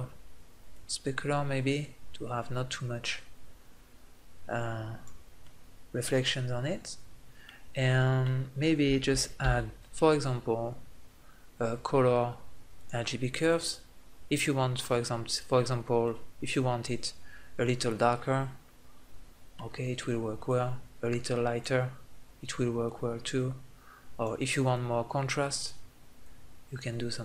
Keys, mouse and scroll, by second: 0.5-2.2 drag, 5.0 middle click, 7.2 middle click, 9.2 shift+a, 17.4 middle click, 18.3 middle click, 19.5 middle click.